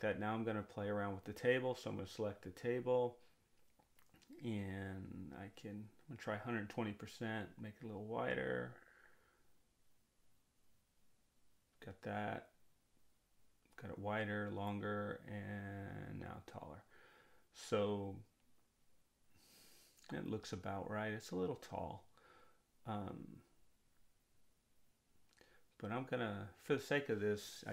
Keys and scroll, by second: 4.6-6.0 typing, 6.1 Return, 9.7-11.0 typing, 13.5 1, 14.1 4, 15.0 5, 16.0 Return.